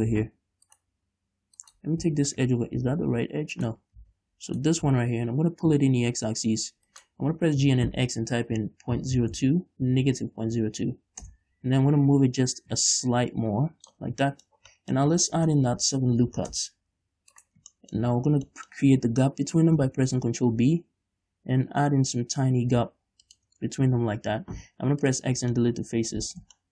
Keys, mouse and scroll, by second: 0.4 z, 1.0-2.1 right drag, 2.3 z, 3.1 g, 4.0 right click, 4.2 z, 4.8 right click, 5.1 z, 5.9-7.3 drag, 7.3 shift+right click, 7.9 g, 11.6 Return, 12.8-14.4 drag, 14.4 scroll down 2, 14.6 shift+middle click, 15.6 ctrl+r, 17.8 right click, 18.2 middle click, 18.5-18.9 scroll up 3, 18.9 shift+middle click, 20.0 ctrl+b, 23.6 shift+click, 23.8 scroll up 1, 24.8 x, 25.6 scroll down 1, 26.0-26.7 middle drag.